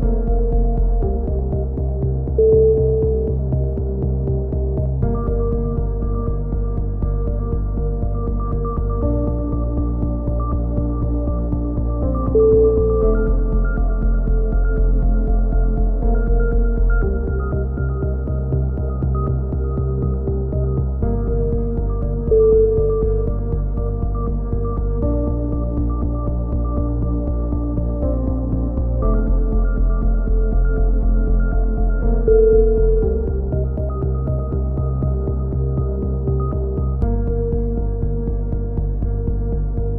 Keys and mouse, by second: 1.1 ctrl+KP_1, 2.7 click, 3.0 right click, 3.4 ctrl+KP_1, 3.7 click, 4.2 z, 4.6 z, 5.1 click, 5.3 a, 5.4 z, 6.5-7.6 right drag, 7.3 click, 8.3 a, 9.9 click, 10.7-12.7 right drag, 12.4 ctrl+KP_1, 12.7 ctrl+z, 13.3 click, 15.7 a, 15.9 click, 19.6 ctrl+KP_1, 20.4-23.1 drag, 23.1 right click, 23.2-24.6 drag, 25.0 click, 25.1 ctrl+z, 25.3 ctrl+z, 25.4 right click, 25.9 click, 27.1 right click, 27.7 click, 28.7 right click, 29.1 click, 29.8 g, 30.8 a, 30.9 z, 31.1 z, 31.5 Tab, 31.7 middle click, 32.8 Tab, 33.3-34.9 right drag, 34.8 ctrl+z, 35.0-36.5 right drag, 36.3 ctrl+KP_1, 37.2 click.